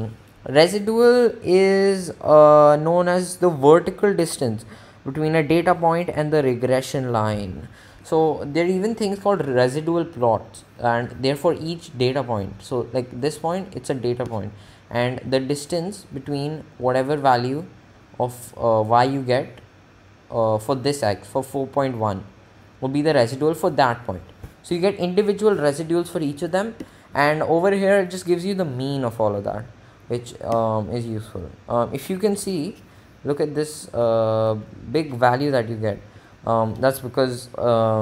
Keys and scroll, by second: 29.5 Right, 30.3 Left, 32.2 Right, 34.1 Left, 34.5 Right.